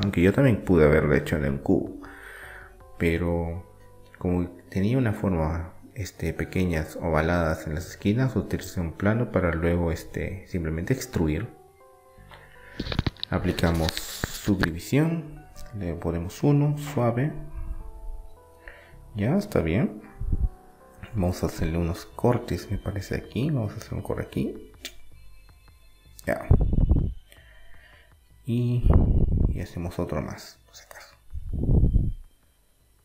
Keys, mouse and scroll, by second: 0.0-3.7 middle drag, 4.7 middle click, 5.4-7.3 drag, 7.3-12.3 middle drag, 11.4 Tab, 12.3-14.0 drag, 16.3 click, 17.0-18.6 middle drag, 20.2 Tab, 20.7-22.3 middle drag, 22.3 ctrl+r, 27.4-29.3 middle drag, 29.4 ctrl+r.